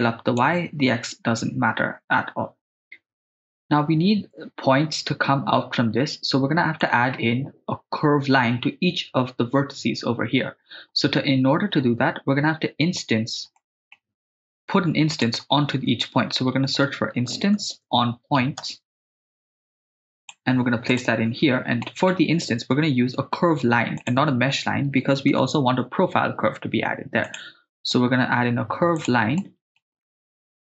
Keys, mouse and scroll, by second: 3.1 ctrl+z, 3.1 middle click, 6.8-7.2 middle drag, 13.6-14.1 middle drag, 14.3 shift+a, 21.8 middle click, 21.8-22.1 scroll up 1, 23.1 shift+a, 29.4 middle click, 30.2-30.6 ctrl+middle drag.